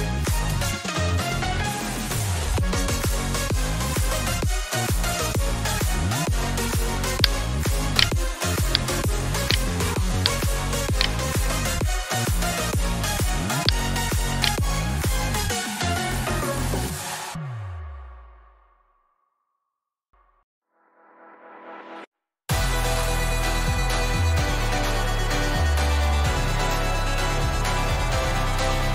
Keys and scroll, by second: 0.0-2.6 typing, 4.3 Return, 14.8 F2, 17.2-20.1 typing, 21.4-22.9 typing, 24.3 Tab, 25.9 Tab.